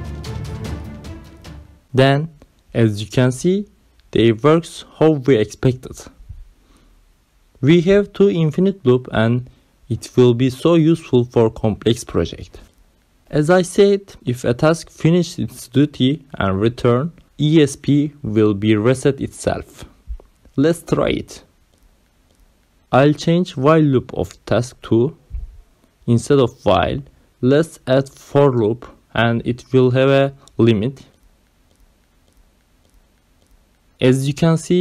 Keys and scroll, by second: 19.8-23.1 typing, 24.1-26.5 typing, 27.7 5, 28.3 space, 29.3 shift+,, 30.1 space, 31.0 ', 32.8 Down, 34.4 ctrl+alt+7.